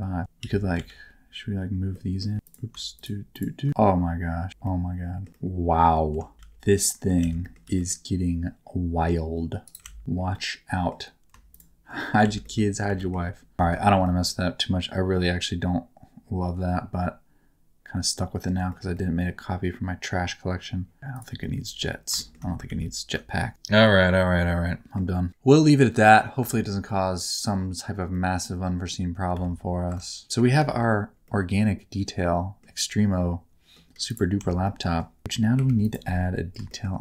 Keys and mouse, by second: 0.2 Tab, 0.4 1, 0.7 alt+z, 1.9 middle click, 2.5 alt+z, 2.9 shift+click, 3.3 shift+click, 4.5 Tab, 4.6 middle click, 5.3 middle click, 6.3 Tab, 6.3 alt+z, 6.8 middle click, 7.2 alt+z, 7.4 middle click, 7.6 g, 9.6 click, 9.8 alt+z, 10.3 middle click, 11.5 shift+click, 12.0 middle click, 12.4 middle click, 12.9 g, 13.0 middle click, 13.5 shift+Tab, 13.6 shift+middle click, 14.0-18.4 middle drag, 18.7 shift+middle click, 18.9-21.0 middle drag, 21.1 click, 21.4 middle click, 22.2 shift+middle click, 22.7 ctrl+z, 23.4-24.9 middle drag, 23.5 Tab, 26.5 shift+middle click, 26.8 middle click, 28.1 middle click, 29.4 alt+a, 29.9 Tab, 30.2 Tab, 30.2 middle click, 30.7 shift+middle click, 31.2-32.6 middle drag, 32.8 middle click, 34.0 click, 34.4 Tab, 34.6 middle click, 35.6 3, 36.6 shift+middle click.